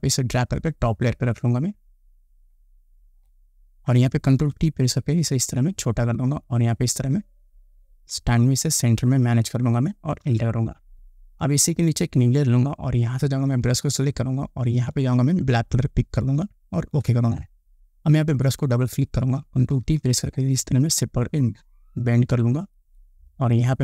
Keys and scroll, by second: 4.7 ctrl+t, 10.5 Return, 20.0 ctrl+t.